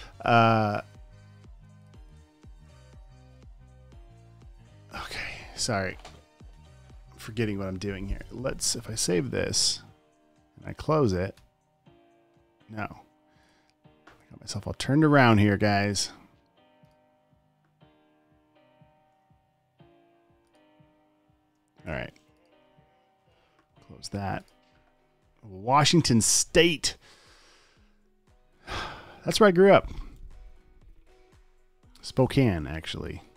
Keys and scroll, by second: 1.9 space, 2.7 space, 2.9 space, 9.4 super+s, 11.7 super+w, 15.7 super+w, 22.0 space, 23.7 super+w, 32.9 space.